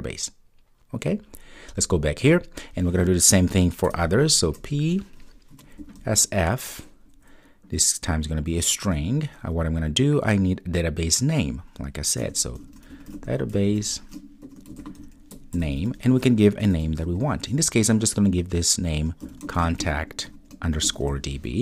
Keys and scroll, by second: 8.9 Return.